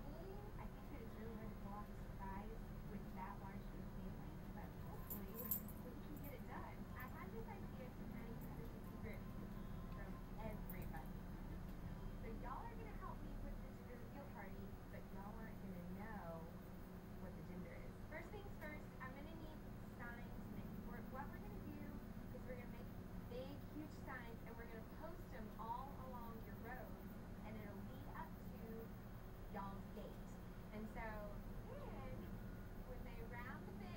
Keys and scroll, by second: 3.9 ], 6.5 ].